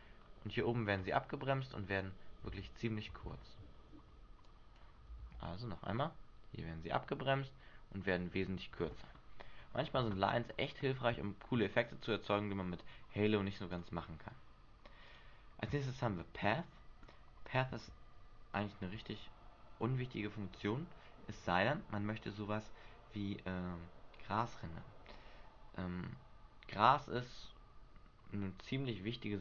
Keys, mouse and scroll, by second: 0.4 scroll down 3, 2.7 alt+a, 3.0-3.9 scroll down 1, 3.9 Escape, 4.7 click, 5.3 alt+a, 9.8 Escape, 10.9-11.4 scroll up 4, 13.9 click, 15.2 click.